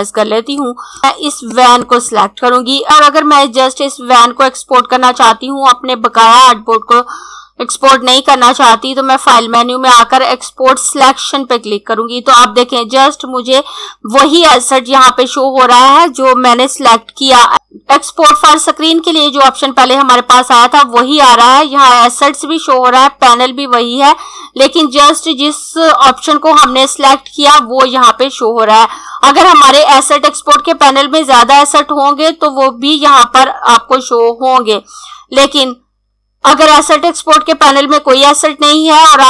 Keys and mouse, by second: 9.2 click.